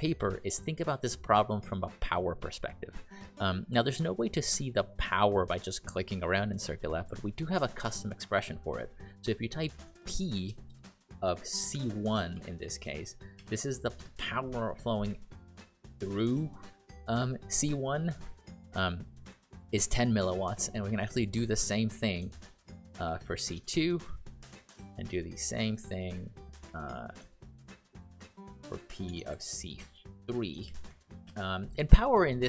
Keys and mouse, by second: 10.0 shift+p, 10.6 shift+(, 11.7-13.3 typing, 14.0 Return, 22.2-24.1 typing, 28.3-31.1 typing, 31.2 Return.